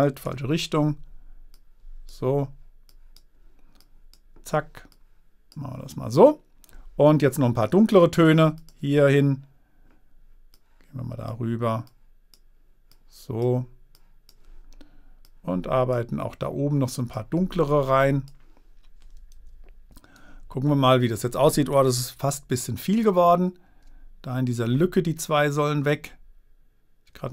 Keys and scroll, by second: 0.7 super+z, 19.7 super+-, 22.5 super+z.